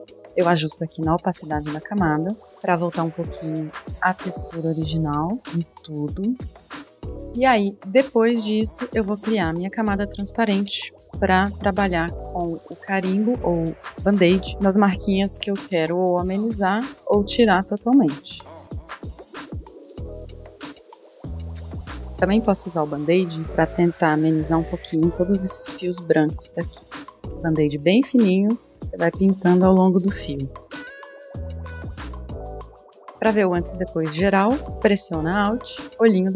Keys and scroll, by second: 9.8 super+=, 10.6-12.3 typing, 11.1 super+=, 15.4-15.8 space, 15.8 super+=, 15.8 space, 15.9 space, 15.9 [, 17.6 space, 19.2-21.2 typing, 20.9 super+z, 22.5 typing, 24.7 typing, 30.9 ], 32.2 [, 33.1 super+-, 33.1 super+-, 33.3 super+-, 33.4 typing.